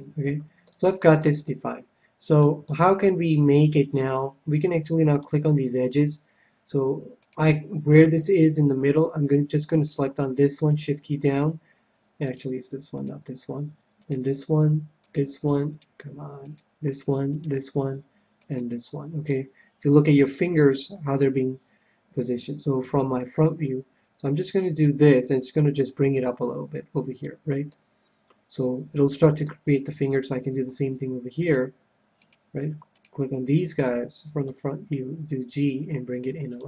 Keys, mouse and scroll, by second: 0.3-4.3 middle drag, 5.0-6.9 drag, 5.6-7.4 middle drag, 7.1-8.9 right drag, 8.9 right click, 9.8-20.1 right drag, 19.3-20.8 middle drag, 22.8 KP_1, 24.3-26.2 drag, 27.7-29.2 middle drag, 30.0-34.6 right drag, 34.4 KP_1, 35.4-36.6 drag.